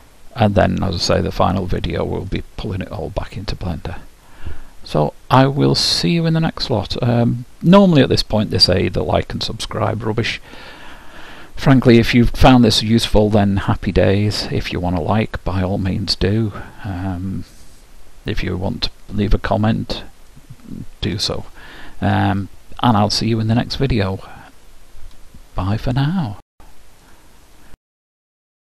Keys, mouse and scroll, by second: 20.5-22.4 middle drag, 22.5-24.4 middle drag.